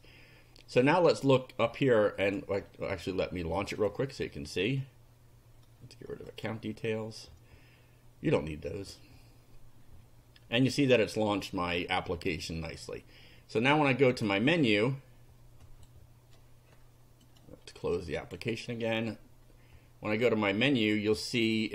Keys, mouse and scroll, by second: 2.2 click, 3.6 click, 6.3 click, 14.2 click, 15.7 click, 17.3 click, 18.2 click.